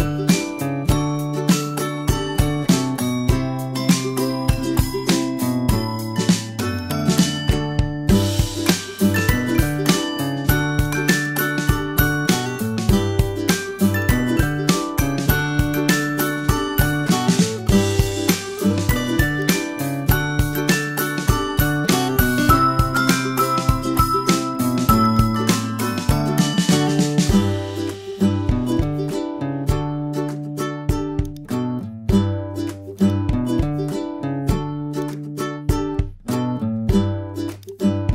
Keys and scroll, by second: 26.0 super+0.